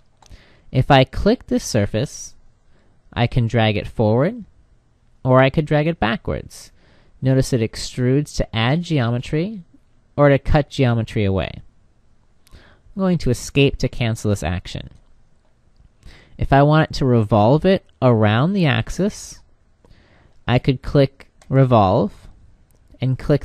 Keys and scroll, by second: 13.3 Escape.